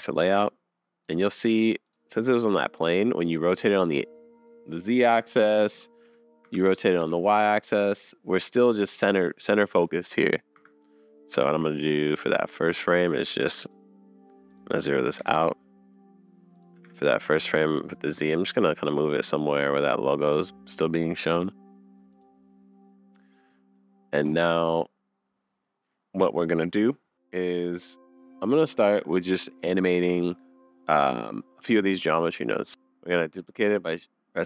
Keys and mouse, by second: 1.1 click, 1.3 click, 2.2-4.0 drag, 2.5 r, 6.3 click, 6.8 r, 11.3 r, 14.6-16.6 drag, 16.8 r, 19.2 r, 22.2 click, 22.5-25.3 middle drag, 32.5 middle drag, 32.7 super+z.